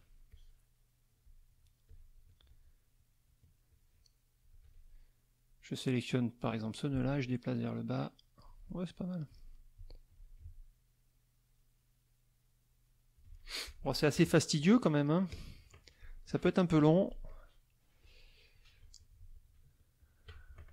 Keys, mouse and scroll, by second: 0.3-1.4 shift+drag, 1.8 shift+click, 3.7 shift+click, 6.4-8.5 drag, 8.9 alt+middle click, 10.4-13.3 alt+drag, 14.1 ctrl+KP_5, 14.8 click, 15.3 click, 17.3 click, 18.0 click, 19.3 shift+click, 20.0 shift+click.